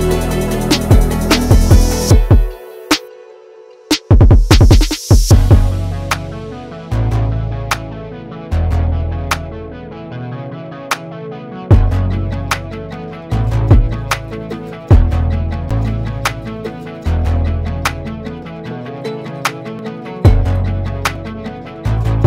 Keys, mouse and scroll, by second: 4.7 click, 7.1 click, 8.4 click, 10.7 click.